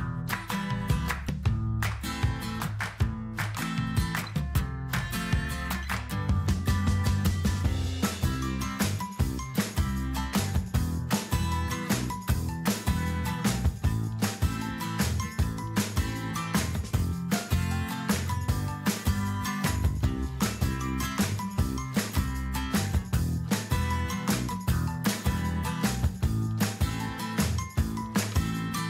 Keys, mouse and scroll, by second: 3.6 ctrl+a, 13.4 middle click, 15.3-15.7 scroll up 2, 16.6 shift+middle click, 19.3 Tab, 24.6 click, 26.8 click.